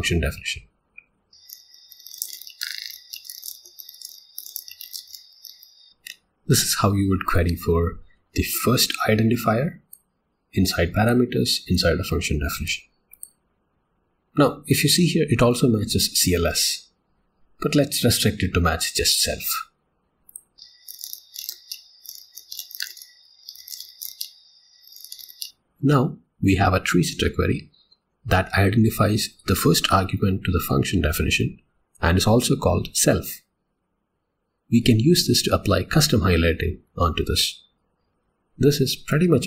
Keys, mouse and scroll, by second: 38.1 j.